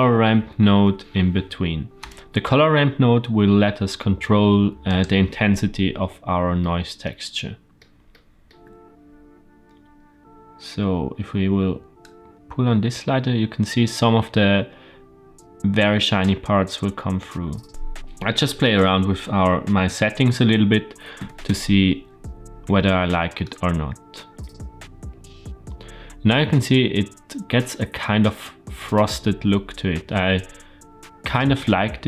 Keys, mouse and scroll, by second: 5.9 scroll up 1, 6.5 shift+scroll up 1, 6.5-7.0 shift+middle drag, 7.3-7.7 shift+middle drag, 8.0 shift+middle click, 11.9-16.2 drag, 16.6-17.7 scroll up 1, 17.7 ctrl+z, 18.6-21.9 drag, 23.3-26.2 drag, 27.2 middle click.